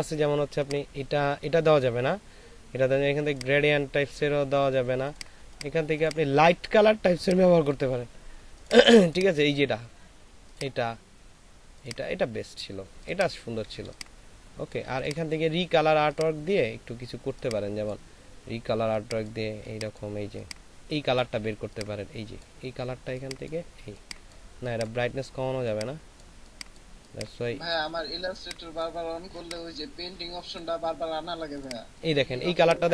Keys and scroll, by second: 13.8 ctrl+space, 32.4 ctrl+alt+space.